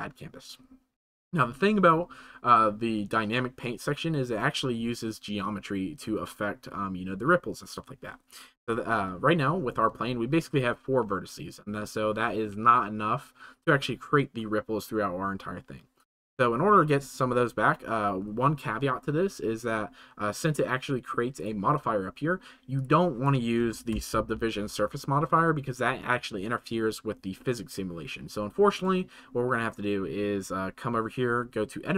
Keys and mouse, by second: 21.3 click, 22.7 click, 31.2 Tab.